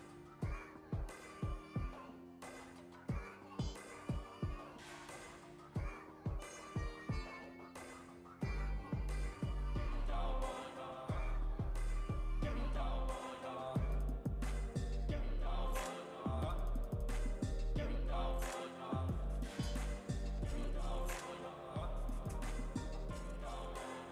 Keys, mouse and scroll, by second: 0.8 alt+a, 1.1 click, 1.9 g, 5.1-6.7 shift+drag, 6.7 Tab, 7.6 Tab, 8.0-10.3 drag, 10.6 g, 12.7-13.8 drag, 13.8 g, 15.4-16.5 drag, 16.7 click, 17.4 g, 20.1 click, 20.7 g, 24.0-24.1 drag.